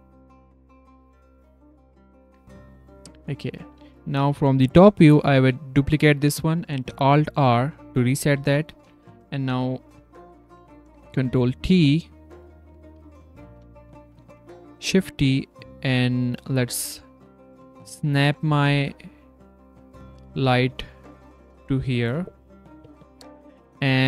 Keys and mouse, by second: 2.2 z, 2.8 drag, 5.1 s, 17.8 g, 18.5 r, 20.7 s, 21.2 r, 23.5 z.